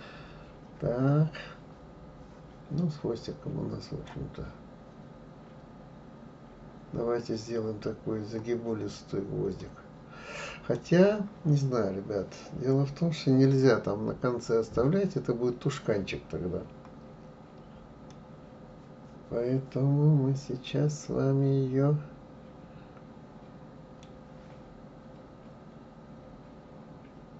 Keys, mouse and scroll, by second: 9.6-12.6 middle drag, 18.1-21.2 middle drag.